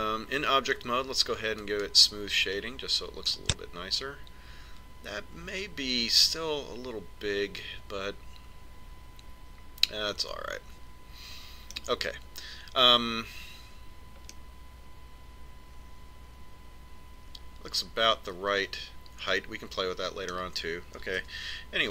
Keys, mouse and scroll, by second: 3.4 click, 5.0-7.0 middle drag, 16.2-18.1 middle drag.